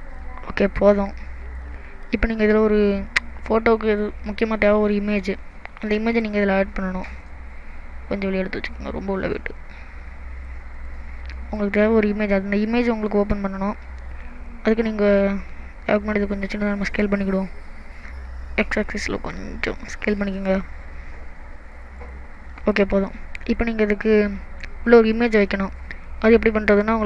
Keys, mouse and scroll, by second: 0.4-0.8 scroll up 4, 1.1 middle click, 1.8-2.3 scroll down 4, 2.3 middle click, 5.9 middle click, 6.5-7.2 scroll up 4, 7.2 click, 8.6 click, 11.1-11.8 scroll down 4, 11.6 middle click, 16.3 click, 18.5 s, 22.0 click, 22.4 middle click, 22.9 scroll up 1, 23.6 middle click.